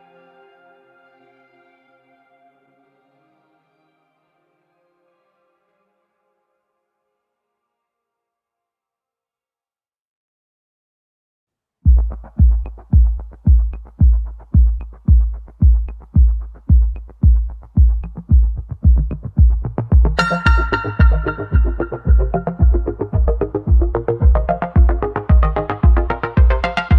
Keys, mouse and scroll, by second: 1.3 shift+click, 2.7 ctrl+z, 3.2-7.5 shift+drag, 7.5 h, 9.1-13.5 shift+middle drag, 17.3-18.9 drag, 18.9 ctrl+j, 20.1-21.4 drag, 21.4-22.6 middle drag, 22.6 Tab, 23.1 scroll up 2, 24.1 1, 25.8-26.9 middle drag.